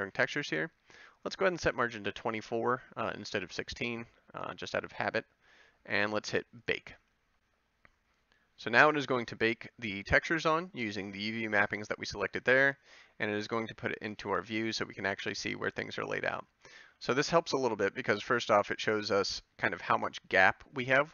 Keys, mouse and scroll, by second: 14.3 Tab, 17.0 Tab, 19.1 Tab, 19.8 Tab.